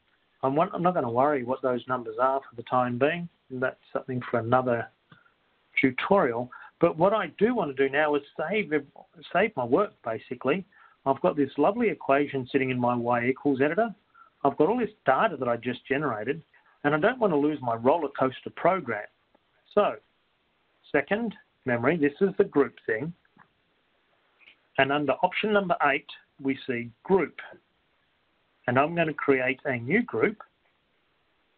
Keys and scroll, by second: 20.6 Return, 27.6 8.